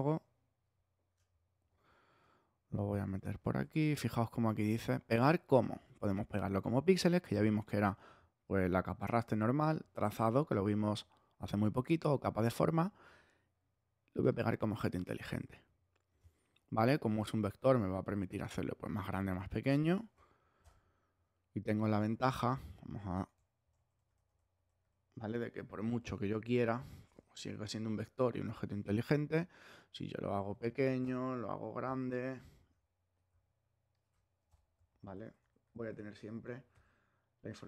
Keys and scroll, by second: 3.5 super+v, 20.6 alt+shift+Return, 21.2 Return, 26.3 super+-, 28.3 super+t, 29.0 shift+super+t, 31.0 alt+shift+Return, 31.7 shift+Return, 32.1 super+t, 32.7 shift+super+t, 34.4 alt+shift+Return, 34.9 super++, 36.7 super+-.